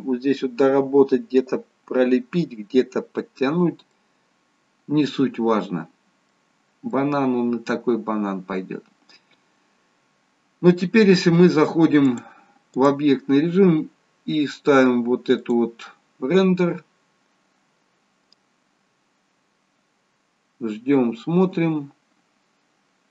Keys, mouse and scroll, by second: 3.8 middle click, 6.5-7.2 scroll up 2, 6.9 middle click, 8.4-8.8 scroll down 1, 12.0 click.